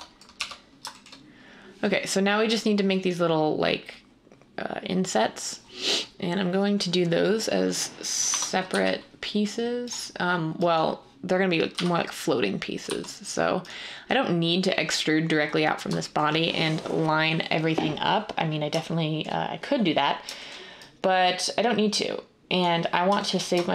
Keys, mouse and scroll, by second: 0.3-1.0 typing, 8.2 Tab, 8.6 typing, 11.7 g, 12.8 x.